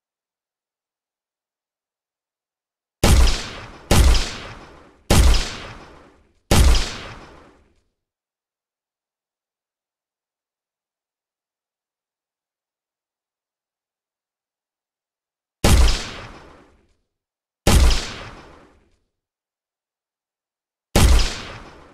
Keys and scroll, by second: 0.7 d, 7.7 w, 12.4 w, 17.2 w, 18.2 a.